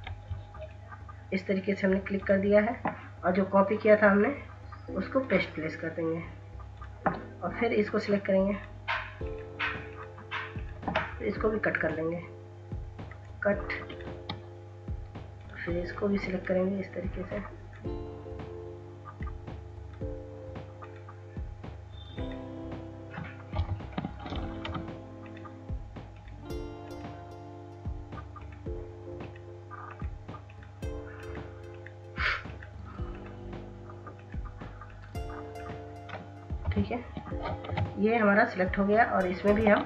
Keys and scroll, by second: 23.1 Delete, 23.9 ctrl+z, 36.5 Delete, 37.5 ctrl+z, 39.6 ctrl+s.